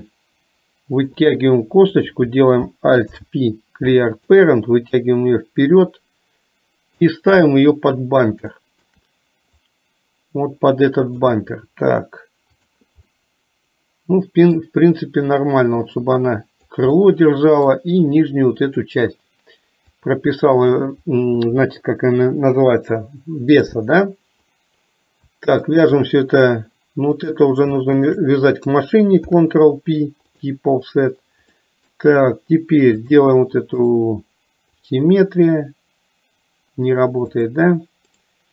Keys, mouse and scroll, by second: 5.2-7.2 drag, 8.6 shift+middle click, 9.7-11.2 drag, 13.2-14.6 middle drag, 15.7-16.8 drag, 16.9 middle click, 20.2 click, 23.6 click, 25.8 shift+click, 27.2 click, 28.0 shift+click, 31.7 middle click, 33.1 click, 33.8-34.9 right drag, 37.4 click, 38.2-38.5 right drag.